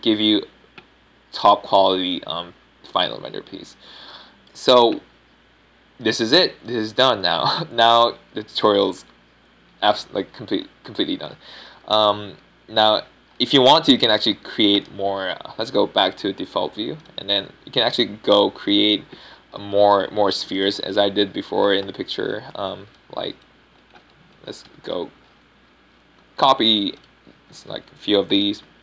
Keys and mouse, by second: 14.3-15.2 drag, 24.2 a, 24.7 b, 26.6 KP_7, 27.7 shift+d.